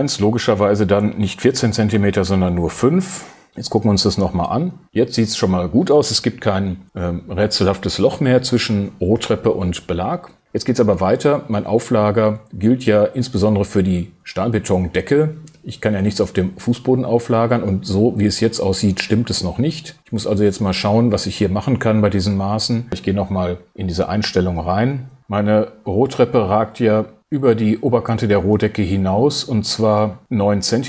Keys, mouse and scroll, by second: 1.5 BackSpace, 2.2 BackSpace, 2.7 0, 3.1 5, 22.9 super+t.